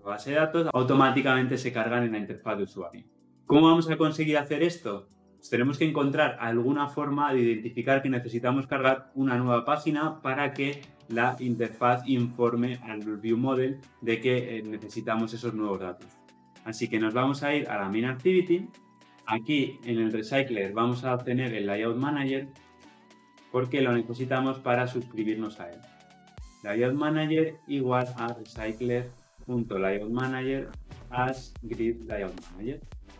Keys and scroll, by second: 26.3 Return.